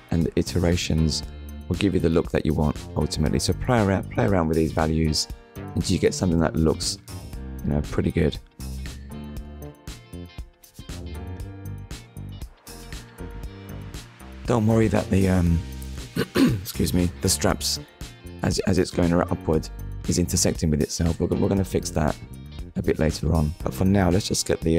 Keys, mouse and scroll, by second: 2.3 click, 3.0 click, 4.0 shift+click, 7.9 scroll up 1, 8.8 shift+middle click, 10.5 click, 19.8 shift+middle click, 22.5 scroll up 1.